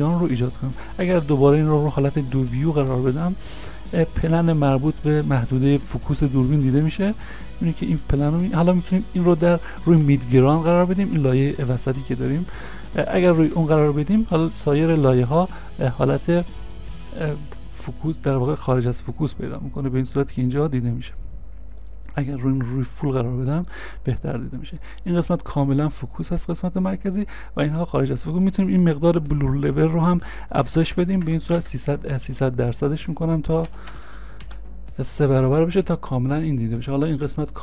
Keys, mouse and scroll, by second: 4.0 middle click, 4.1 scroll down 1, 17.6-18.2 scroll down 1, 18.3 middle click, 21.0 scroll down 1, 23.3-23.8 scroll up 1, 23.9 middle click, 25.2-28.2 scroll down 1, 31.0-31.3 scroll, 31.3 3, 31.3 0, 31.6 Return, 33.7 Return, 34.0 3, 34.0 0, 34.5 Return, 34.5 0, 35.9-36.4 scroll up 1, 36.4 scroll down 1.